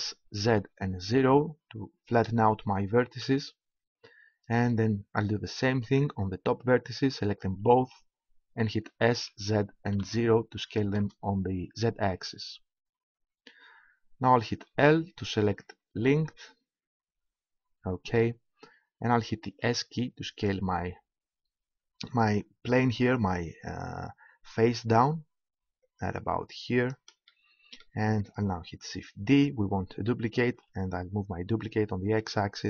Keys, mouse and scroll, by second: 5.7-9.4 right drag, 8.9 s, 14.6 l, 16.2 l, 17.2 l, 19.4 s, 26.0-27.5 drag, 27.5 right click, 29.2 shift+d.